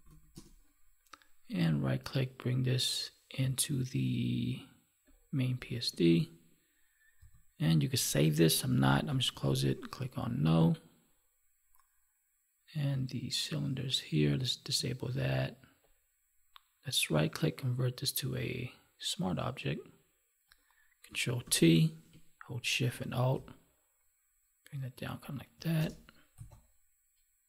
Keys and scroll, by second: 9.2 ctrl+w, 21.3 ctrl+t.